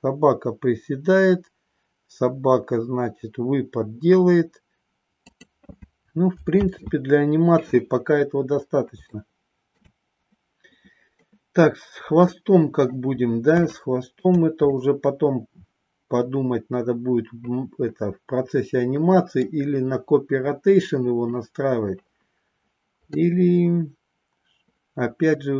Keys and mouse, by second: 5.4 click, 6.5 ctrl+z, 9.1 shift+middle click, 12.3 middle click, 13.8 shift+middle click, 14.7-19.5 middle drag, 23.1-25.5 middle drag.